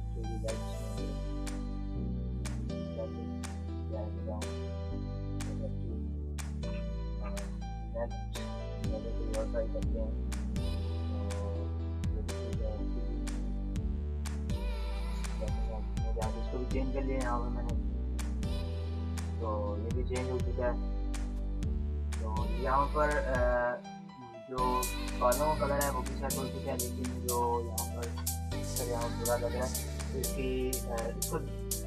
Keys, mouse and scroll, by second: 0.0-1.1 scroll down 1, 2.6 click, 7.0 ctrl+z, 7.2 click, 7.2 click, 8.6 scroll down 1, 11.3 Down, 12.1 click, 14.8 ], 14.8 [, 20.2 click, 22.5 ctrl+-, 23.6 ctrl+=, 23.6 ctrl+-, 24.0 ctrl+=, 24.5 click, 24.9 ctrl+=, 26.3 ctrl+-, 27.9 Delete, 29.3 ctrl+z, 29.6 click.